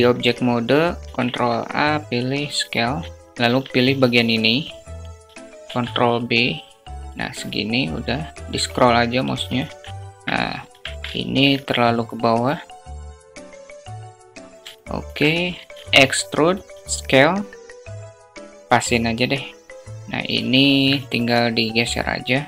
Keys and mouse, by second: 0.0 ctrl+a, 0.2 ctrl+a, 3.3 Tab, 4.6 ctrl+b, 8.6 Tab, 9.9 alt+z, 10.3 alt+shift+middle click, 11.3-13.8 drag, 14.3 alt+shift+middle click, 14.7 e, 15.7 s, 19.2 Tab, 19.9 alt+z.